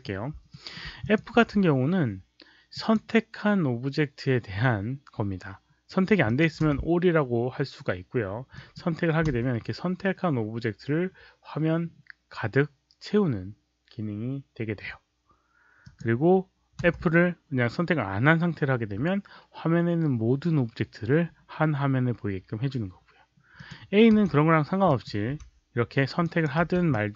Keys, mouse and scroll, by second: 0.4 alt+middle drag, 0.9 click, 1.2 f, 2.7 click, 6.2 click, 6.6 f, 8.5 drag, 9.2 f, 15.7 click, 16.8 f, 23.5 click, 24.1 a, 24.8 click, 26.1 click, 26.8 click.